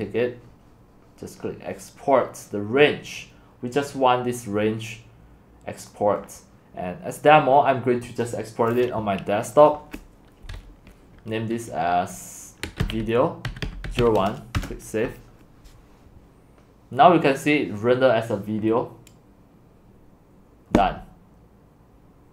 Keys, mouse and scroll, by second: 0.0-0.4 drag, 0.4-3.3 scroll down 3, 3.3-5.6 scroll down 1, 5.9-6.8 drag, 8.0 click, 9.5-10.6 drag, 12.4-14.5 typing, 12.6 click, 14.5 Return, 22.2 click.